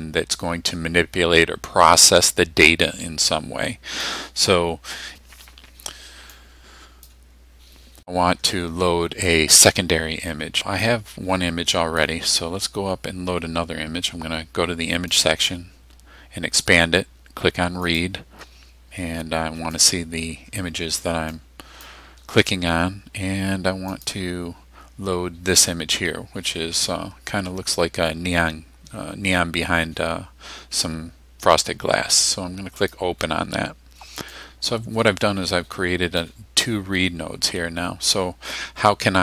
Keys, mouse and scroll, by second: 4.0-5.1 drag, 6.4-7.3 drag, 10.9-12.3 drag, 15.2 click, 17.9 click, 19.8 click, 21.4-22.0 drag, 24.0 click, 32.8 click, 34.4-36.4 drag.